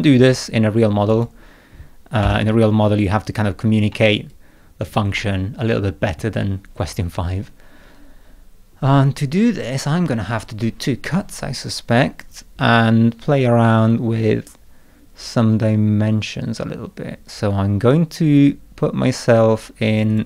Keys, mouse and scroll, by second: 1.1 click, 2.2 0, 3.0 scroll up 1, 3.9 middle click, 4.3 click, 5.1 middle click, 12.5-13.6 scroll down 2, 13.9 scroll up 2, 20.1 click.